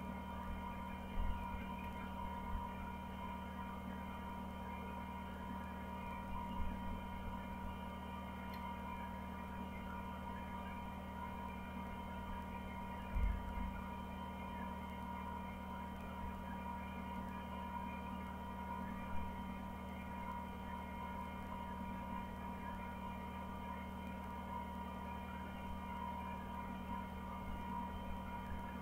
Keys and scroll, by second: 0.8 Down, 1.1 Down, 1.3 Down, 1.6 Down, 1.8 Down, 2.0 Down, 2.3 Down, 2.7 Down, 5.1 Down, 6.0 Down, 6.2 Down, 6.5 Down, 6.7 Down, 7.0 Down, 7.2 Down, 7.4 Down, 11.8 Down, 12.1 Down, 12.4 Down, 17.0 Down, 18.0 Down, 19.3 Down, 20.4 Down, 20.9 Down, 21.4 Down, 21.7 Down, 22.1 Down, 22.5 Down, 23.3 Down, 25.6 Down, 26.2 Down, 26.5 Down, 26.8 Down, 27.1 Down, 27.3 Down, 27.8 Down, 28.1 Down, 28.4 Down.